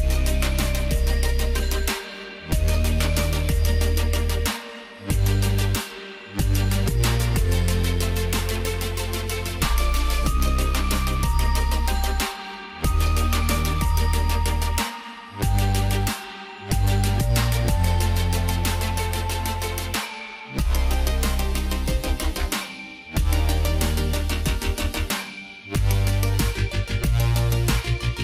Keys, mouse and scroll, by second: 3.7 click, 6.0 click, 10.9 click, 12.5 click, 15.1 shift+click, 17.5 click, 19.5 click, 21.0 click.